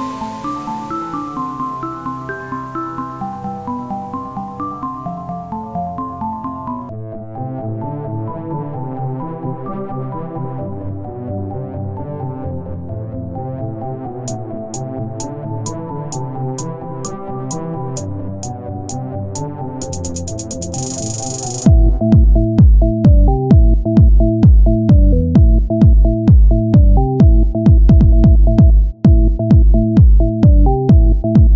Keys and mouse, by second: 1.3 ctrl+z, 1.5 ctrl+b, 3.5 click, 4.5 middle click, 4.7 ctrl+Tab, 6.3 click, 7.5-11.8 drag, 7.6 Tab, 11.8 Tab, 12.5 z, 12.8 c, 14.4-16.1 drag, 14.7 z, 17.1 ctrl+Tab, 19.1 Tab, 20.0 KP_1, 20.6 z, 21.5 r, 22.8 t, 25.6 click, 25.8 t, 26.5 z, 27.2 r, 27.9 click, 28.9 r, 30.9-31.5 drag.